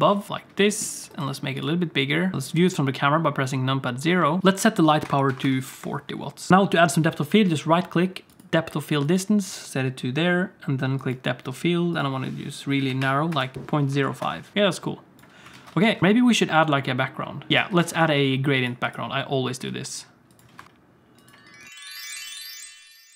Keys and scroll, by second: 0.3 g, 2.3 KP_0, 6.5 alt+a, 6.5 ctrl+s, 6.5 alt+shift+z, 13.5 i, 15.6 alt+a, 15.9 ctrl+s, 17.5 alt+a, 17.5 space, 17.8 ctrl+s, 19.6 s.